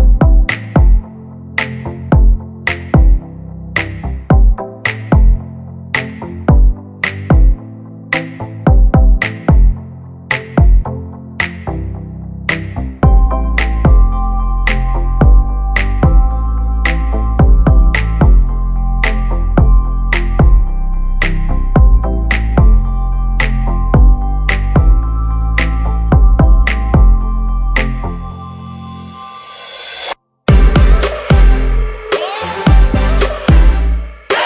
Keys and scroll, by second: 5.9 space, 6.4 p, 7.6 Escape, 9.5 space, 10.4 m, 11.1 Up, 12.1 space, 15.9 l, 21.3 space, 22.2 Delete, 28.2 space, 28.6 p, 31.0 space, 32.1 m, 32.8 Up, 33.8 space.